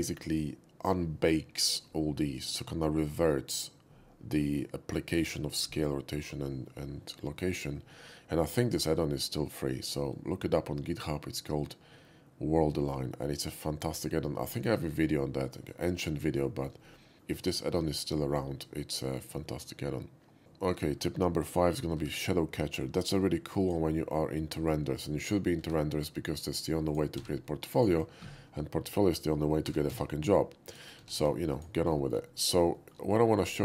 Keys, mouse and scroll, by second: 9.7 shift+middle drag, 10.1-13.8 shift+middle drag, 16.5 shift+middle drag, 16.8-17.2 shift+middle drag, 18.8-19.3 middle drag, 20.4 shift+x, 20.4 middle click, 22.0 shift+a, 23.6 click, 25.0 middle drag, 25.6 shift+a, 26.9 click, 27.2 s, 27.7 click, 29.7 g, 29.9 z, 30.7 click, 31.0 s, 31.2 s, 31.5 click, 32.0 middle click, 32.3 middle click, 32.8 middle click, 33.1 shift+middle click, 33.4 shift+middle click.